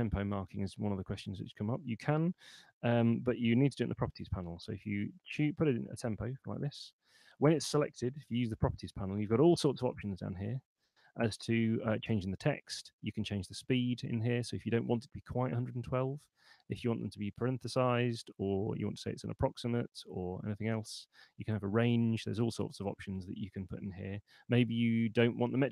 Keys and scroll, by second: 2.7-4.3 typing, 4.6 Down, 5.0 Return, 6.2 Escape, 8.2 super+8.